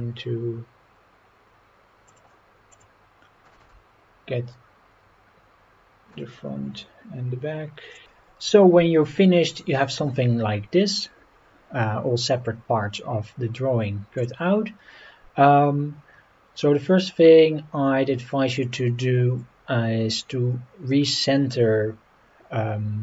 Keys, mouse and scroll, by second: 2.1 click, 2.7 click, 3.4 g, 6.1 click, 6.7-7.2 scroll up 4, 14.2 click, 18.5 click.